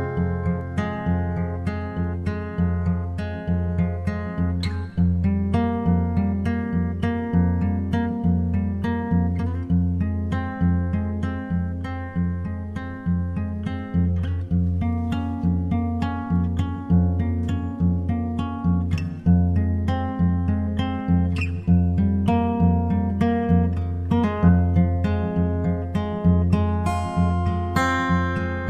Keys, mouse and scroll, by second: 1.1-3.1 drag, 8.3-10.2 drag, 15.5-17.2 drag, 16.5-19.0 middle drag, 17.5-19.4 drag, 22.2-24.1 drag.